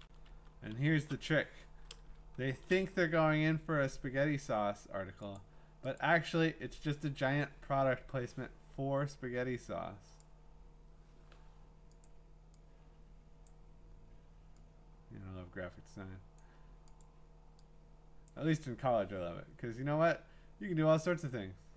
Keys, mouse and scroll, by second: 0.0 Up, 0.3 Up, 0.7 Up, 2.5 Right, 5.4 click, 6.0 click, 6.6 scroll down 2, 10.2 click, 12.0 click, 13.5 click, 16.4 click, 17.0 click, 18.3 click, 21.3 click.